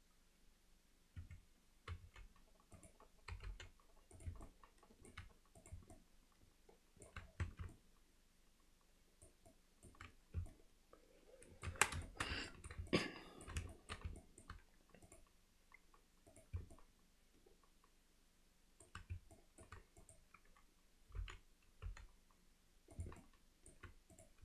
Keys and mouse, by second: 3.3 g, 4.5 alt+middle click, 5.6 click, 5.9-7.1 alt+middle drag, 7.5 Tab, 7.7-9.3 alt+middle drag, 9.5-9.9 alt+middle drag, 10.5-11.7 alt+middle drag, 11.7 Tab, 12.1 alt+shift+middle click, 12.5 middle click, 12.9 alt+middle click, 13.7 alt+shift+middle click, 14.2 alt+middle click, 15.1 click, 16.3 click, 16.8-18.9 alt+middle drag, 19.4 alt+middle click, 20.0 click, 23.2 middle click, 24.1 click.